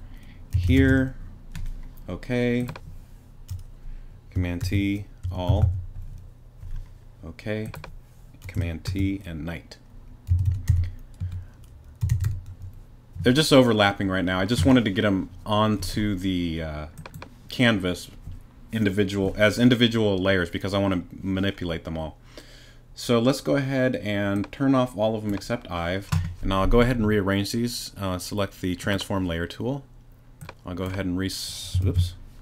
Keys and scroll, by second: 0.4-1.4 typing, 4.6 shift+super+t, 5.2 shift+super+a, 5.5 shift+l, 8.9 shift+super+t, 10.1-12.7 typing, 31.8 shift+super+z.